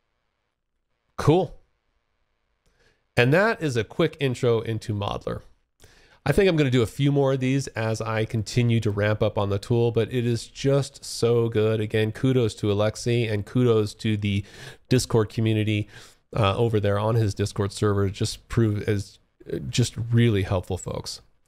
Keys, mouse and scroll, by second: 0.5 alt+click, 2.9 alt+middle click, 3.4 alt+click, 4.2 alt+middle click, 4.6-4.9 alt+scroll up 1, 4.9 alt+click, 6.3 alt+middle click, 7.3 alt+click, 8.8 alt+middle click, 9.4 alt+scroll down 1, 9.7 alt+click, 11.2 alt+middle click, 11.8 alt+click, 12.6 alt+middle click, 18.9 alt+click, 19.9 alt+middle click.